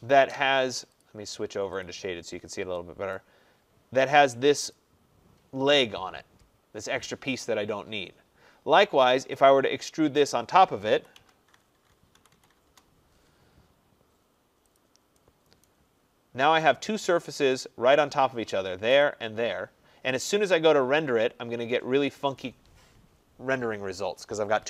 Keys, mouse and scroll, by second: 1.1 click, 1.9 click, 2.4 middle click, 2.6 middle click, 3.2 right click, 3.5 middle click, 3.6 middle click, 3.7 middle click, 4.8 click, 9.5 click, 11.0 typing, 12.2-12.7 typing, 14.8 click, 15.7 right click, 16.0 middle click, 16.1 middle click, 16.7 click, 18.2 click, 19.0 click, 20.6 click.